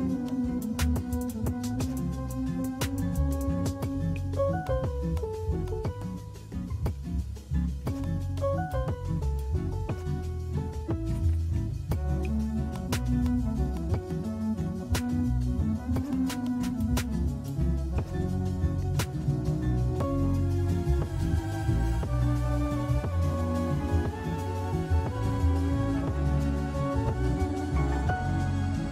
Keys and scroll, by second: 7.0 ctrl+alt+KP_0.